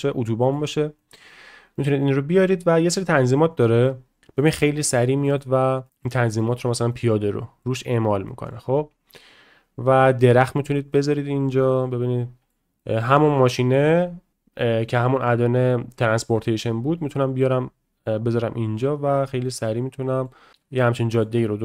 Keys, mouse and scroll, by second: 1.0 middle click, 1.8 shift+middle click, 3.5 click, 4.4-5.4 middle drag, 5.8 click, 6.9-7.6 drag, 8.2 middle drag, 10.5 click, 11.0-12.5 middle drag, 12.8 middle click, 17.4-18.0 drag, 19.4-20.3 middle drag, 20.5-21.2 middle drag.